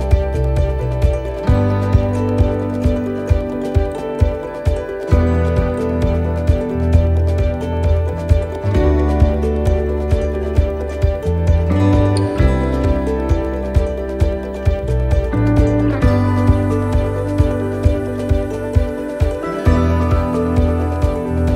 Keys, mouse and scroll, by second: 0.3 middle click, 2.5 s, 5.3 click, 7.0 s, 9.3 middle click, 12.4 middle click, 12.4 click, 13.5 middle click, 16.6 middle click, 17.8 right click, 18.9 l, 19.8 click.